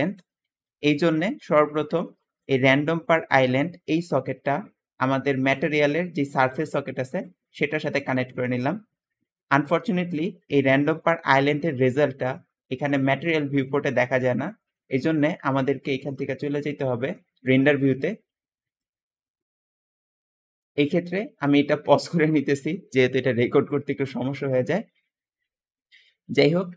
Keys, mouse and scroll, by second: 0.4 scroll down 2, 4.0-7.1 drag, 9.1-11.4 scroll down 2.